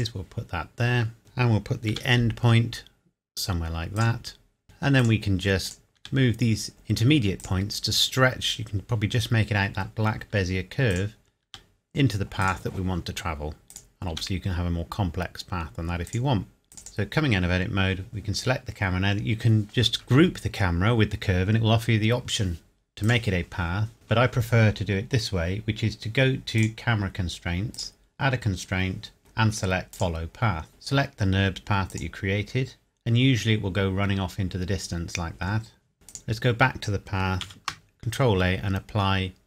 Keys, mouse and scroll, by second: 1.9 g, 4.0 click, 4.0 click, 4.6 g, 5.0 click, 6.0 g, 7.4 click, 8.6 scroll up 1, 10.9 click, 11.4 g, 12.4 click, 14.1 g, 16.1 click, 16.9 click, 19.9 shift+click, 23.0 click, 26.6 click, 29.9 click, 33.9 scroll down 1, 35.2 scroll up 1, 35.9 scroll down 1, 36.1 click, 37.4 ctrl+a.